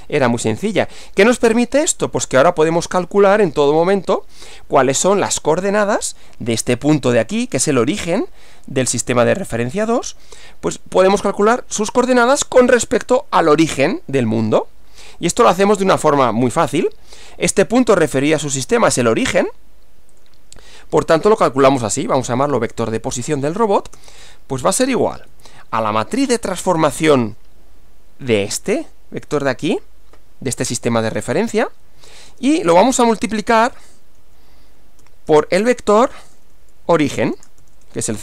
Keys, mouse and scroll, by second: 1.5 scroll down 2, 2.1 scroll down 2, 2.9 click, 3.7 Return, 15.7 click, 20.2 click, 21.4-22.7 typing, 24.0-25.7 typing, 26.9 space, 30.8 Left, 32.1-38.2 typing.